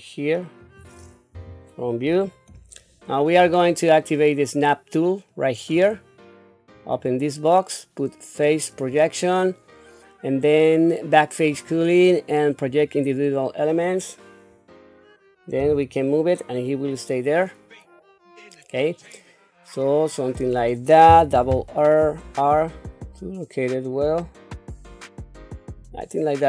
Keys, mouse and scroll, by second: 1.3 KP_1, 2.0 scroll up 3, 5.7 click, 6.7-14.0 drag, 15.6 g, 21.2 r.